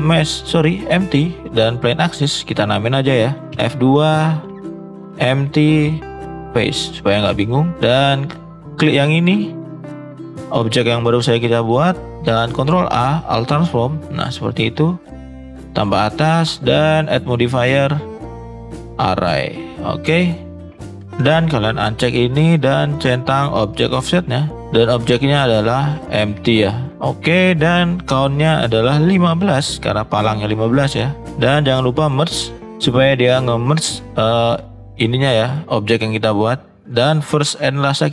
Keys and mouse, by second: 2.1 middle click, 3.5 F2, 8.1 click, 8.6 middle drag, 9.1 middle click, 10.2 middle drag, 10.7 middle drag, 11.1 middle click, 12.5 ctrl+a, 13.7 middle drag, 15.0 click, 15.7 shift+middle drag, 17.0-18.9 drag, 19.7 shift+middle click, 22.2 click, 23.1 click, 23.7 click, 28.3-30.0 drag, 31.9 click, 32.5 click, 37.6 click.